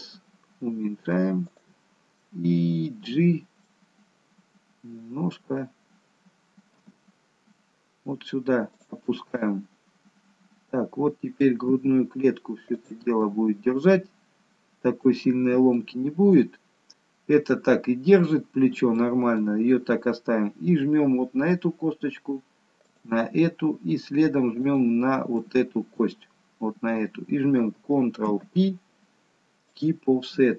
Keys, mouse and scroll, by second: 2.2 middle click, 2.2 s, 5.0 d, 6.7 g, 9.0 middle click, 11.6 g, 13.2 middle click, 15.8 middle click, 19.1 middle click, 23.1 shift+click, 25.4 shift+click, 25.5 middle click, 28.2 ctrl+p, 30.2 middle click.